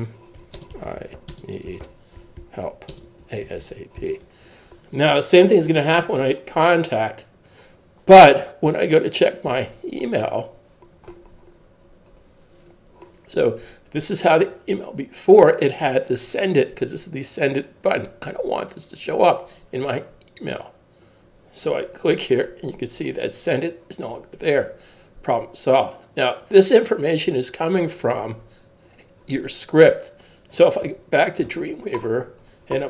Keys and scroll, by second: 0.0-4.5 typing, 8.7 super+Tab, 30.8 super+Tab.